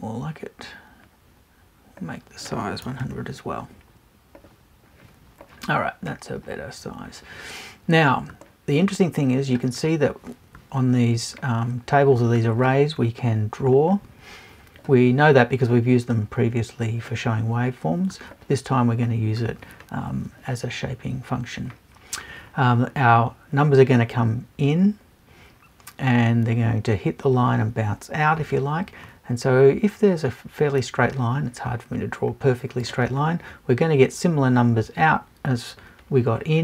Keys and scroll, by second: 2.8 BackSpace.